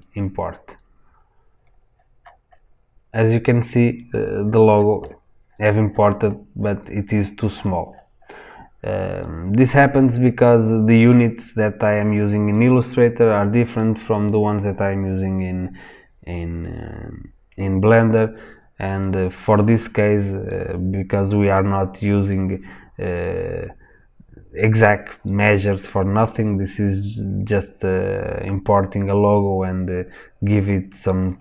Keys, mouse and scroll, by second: 1.4-4.3 scroll up 2, 4.3-4.9 scroll down 2, 4.9 scroll down 1, 5.4 scroll up 1, 7.1-7.8 scroll down 1, 7.8-11.9 scroll up 1, 19.4 click.